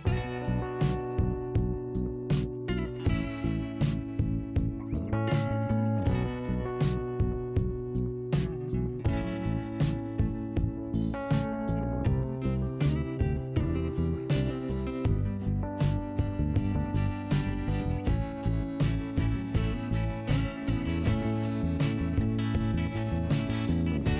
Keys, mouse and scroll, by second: 2.7 scroll down 1, 4.0 click, 6.4 scroll up 1, 7.5 click, 7.6 click, 8.0 click, 8.0 double click, 8.5-10.9 scroll down 2, 11.5 click, 11.6 click, 12.7 click, 12.9 click, 14.4 click, 14.5 click, 15.9 click, 16.0 click, 16.7 scroll down 1, 17.3 click, 18.2 click, 18.3 click, 19.1 click, 23.4 scroll up 1.